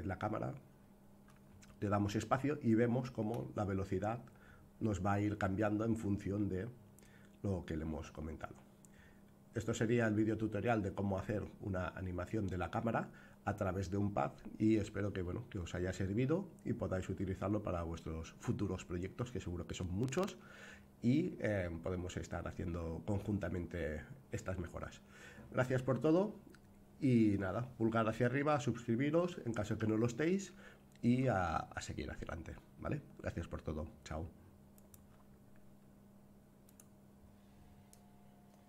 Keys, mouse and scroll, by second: 1.8 space, 34.7 click.